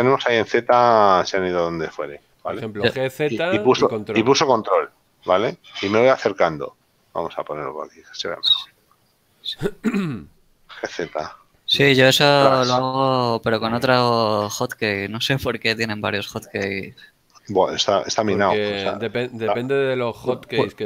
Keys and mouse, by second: 8.0 shift+middle click, 10.6 g, 19.3 ctrl+click.